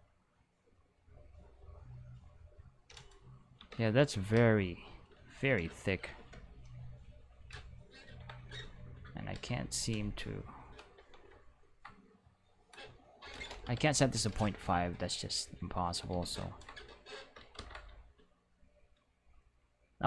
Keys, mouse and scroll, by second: 0.4-2.8 drag, 3.6 Tab, 3.9 a, 4.3 alt+s, 5.1 click, 5.1 right click, 5.6 q, 6.2 alt+a, 7.0 right click, 8.1 ctrl+l, 9.3 alt+s, 10.7 click, 11.0 Tab, 12.4 click, 13.3 ., 13.6 5, 13.7 Return, 15.2 click, 16.1 z, 17.6 ctrl+z.